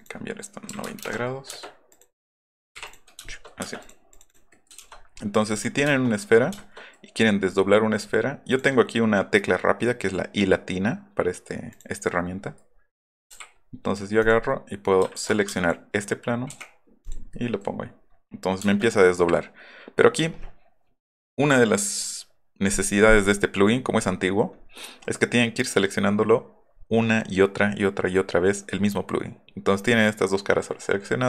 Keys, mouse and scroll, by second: 0.7 KP_9, 0.8 KP_0, 1.0 KP_Enter, 1.5 space, 1.9 click, 2.8 click, 3.6 space, 3.8 click, 4.1 click, 4.3 click, 4.5 middle click, 5.5 click, 5.8 shift+middle click, 7.2 middle click, 8.5 click, 11.7 click, 12.4 middle click, 12.7 middle click, 13.0 middle click, 13.3 u, 14.2 click, 15.1 ctrl+z, 15.5 space, 16.5 o, 17.3 middle click, 17.8 middle click, 18.6 space, 23.7 middle click, 24.2-24.6 middle drag, 24.7 middle drag, 25.0 middle click, 29.7 middle click.